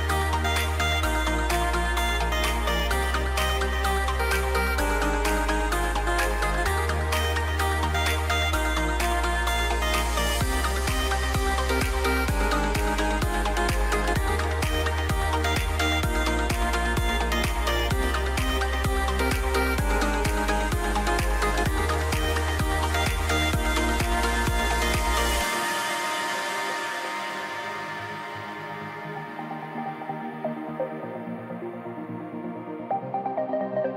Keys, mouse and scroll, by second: 2.7 a, 8.9 ctrl+r, 21.7 g.